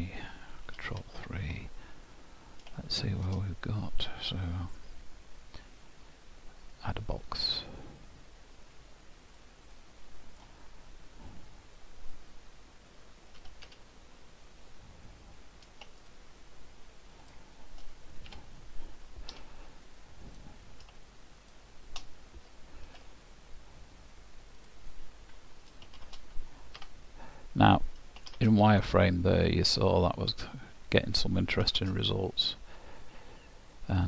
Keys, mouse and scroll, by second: 0.8 ctrl+KP_3, 1.5-2.0 scroll up 11, 2.1-2.7 scroll down 3, 2.8 shift+middle click, 6.7 click, 9.8 middle click, 10.4 scroll down 1, 18.3 Tab, 19.4 2, 20.3 click, 21.4 shift+click, 22.8 ctrl+b, 26.0 shift+z, 26.8 Tab, 28.3 shift+z, 29.0-29.4 scroll down 1, 29.4 middle click, 31.7 shift+z, 32.6-33.9 scroll down 3, 33.9 click.